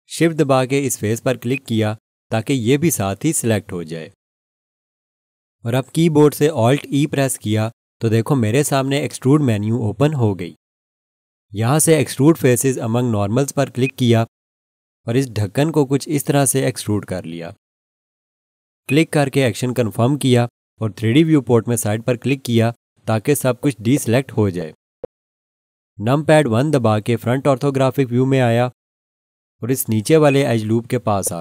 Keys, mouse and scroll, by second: 1.5 shift+click, 6.9 alt+e, 13.8 click, 18.9 click, 22.3 click, 23.4-24.6 scroll down 1, 27.0 1, 30.3 alt+shift+click, 31.1 scroll up 1.